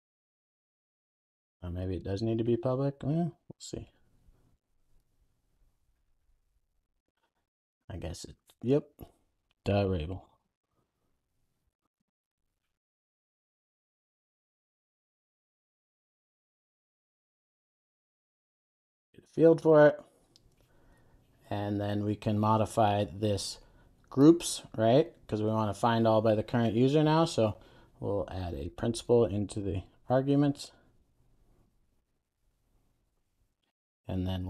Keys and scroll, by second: 3.5 alt+Return, 4.8 Return, 12.5 super+s, 31.2 Return.